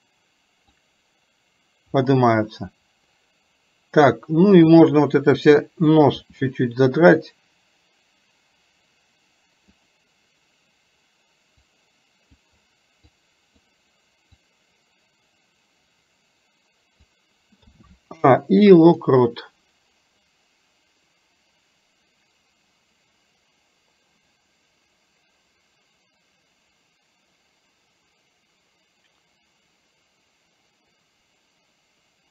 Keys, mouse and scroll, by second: 11.7 click, 13.2 click, 14.6-17.1 drag, 20.3-32.3 drag.